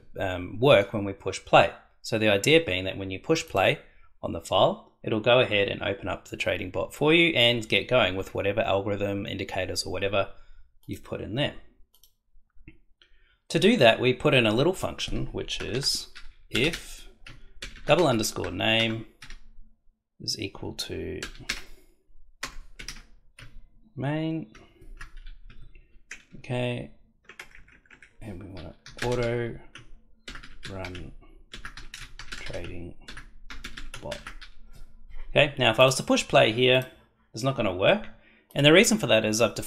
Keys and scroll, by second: 15.5 Return, 16.5-19.2 typing, 18.8 Return, 21.2-22.8 typing, 25.5 Tab, 26.2 BackSpace, 28.8 a, 29.0 u, 29.1 t, 29.2 o, 30.2-34.9 typing.